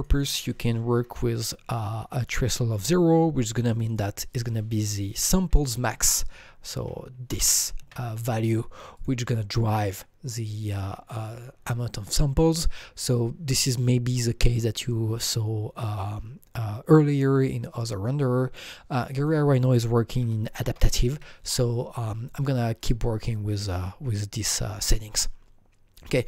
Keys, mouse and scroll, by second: 0.0 click, 0.1 double click, 1.0 KP_0, 3.7 click, 3.9 double click, 5.1 KP_1, 5.9 KP_Add, 7.3 double click, 7.3 BackSpace, 7.8 KP_6, 8.9 click, 10.7 click, 19.0 click, 19.0 KP_6, 19.0 click, 19.1 double click, 20.1-21.1 typing, 20.9 double click, 22.8 click, 26.0 click, 26.0 KP_4, 26.0 KP_2, 26.0 click.